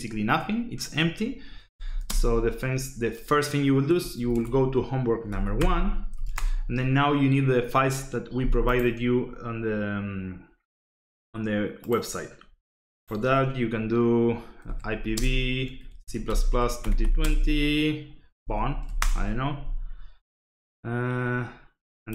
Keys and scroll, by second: 1.4-2.4 typing, 3.9-6.7 typing, 5.3 Tab, 5.6 Return, 14.4-19.3 typing.